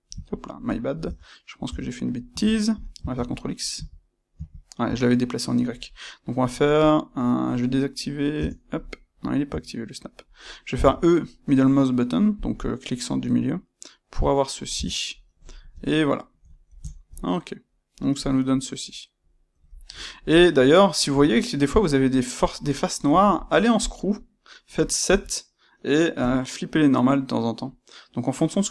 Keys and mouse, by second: 0.2 Escape, 0.6 middle click, 1.0 Tab, 2.1 middle click, 3.1 ctrl+z, 5.1 middle click, 8.3 Tab, 10.7 e, 12.4 click, 12.5 middle click, 14.7 Tab, 14.7-28.7 middle drag, 23.0 space.